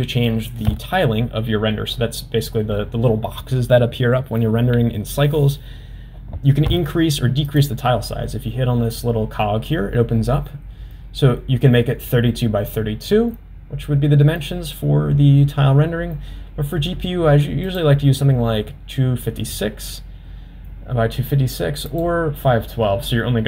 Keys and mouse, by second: 7.6 click.